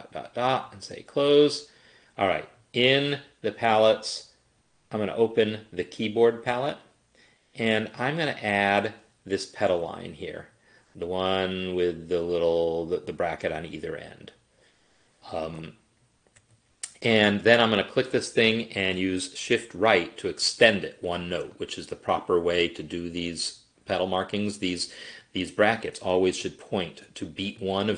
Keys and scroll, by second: 19.9 shift+Right, 24.7 Escape.